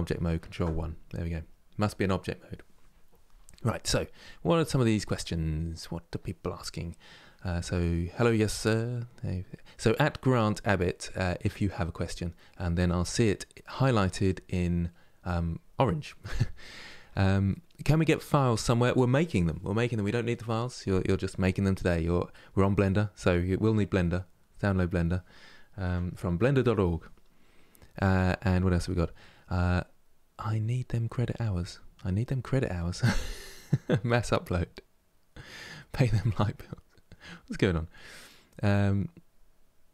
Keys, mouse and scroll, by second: 0.1 ctrl+1, 22.5-25.5 middle drag, 25.5 KP_Decimal.